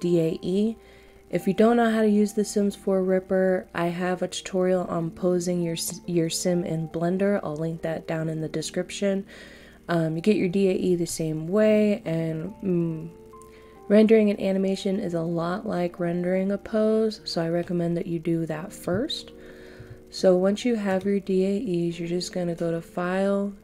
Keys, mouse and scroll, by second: 11.0 middle click, 20.9 click.